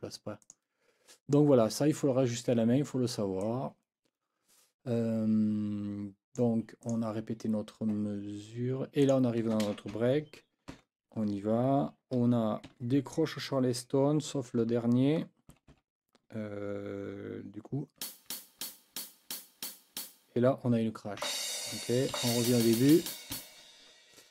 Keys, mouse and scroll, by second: 0.4 click, 3.4-6.6 drag, 6.8 click, 9.0 click, 10.7 n, 12.6 KP_4, 15.5 h, 18.0 g, 21.2 c, 22.1 Left, 22.8 Left.